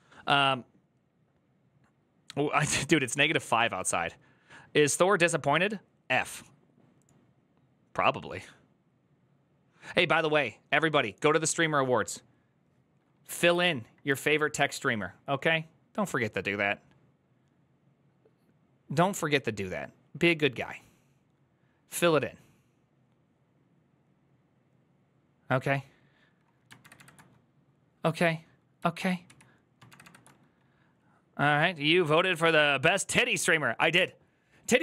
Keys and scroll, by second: 13.4 alt+shift+Left, 13.9 shift+Left, 26.6 alt+shift+Right, 29.1 alt+h, 29.7 alt+shift+Right.